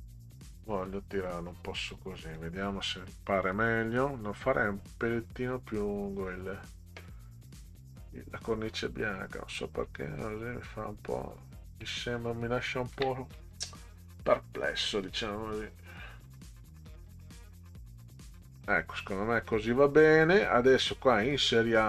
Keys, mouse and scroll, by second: 0.7 Up, 2.4 click, 6.5 click, 8.1 click, 9.6 click, 12.9 ctrl+j, 15.0-16.2 drag, 17.3 click, 20.4 click.